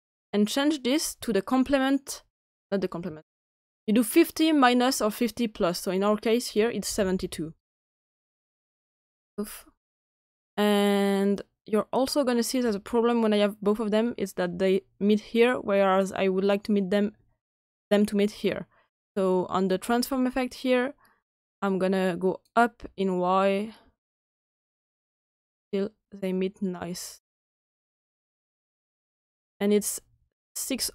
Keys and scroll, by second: 6.8 typing, 9.0 Return, 12.1 Return.